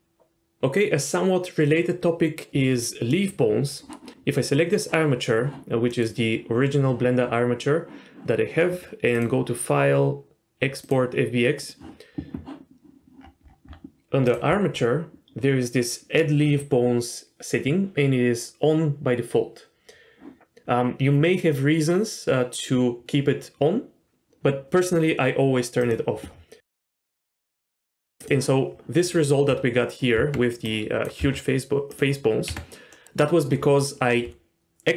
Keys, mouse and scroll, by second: 3.1 middle click, 3.7-5.9 scroll up 1, 5.9 middle click, 9.1-11.7 drag, 28.7-29.1 scroll up 1, 29.1 click, 30.2 Tab, 30.6 click, 31.2 s, 32.2 scroll up 1, 32.4 Tab, 32.9 middle click, 33.0-34.0 scroll down 1.